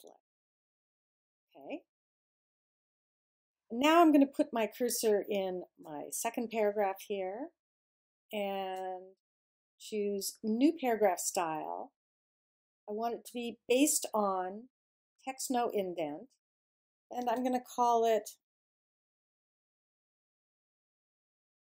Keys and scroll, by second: 18.0-21.7 typing.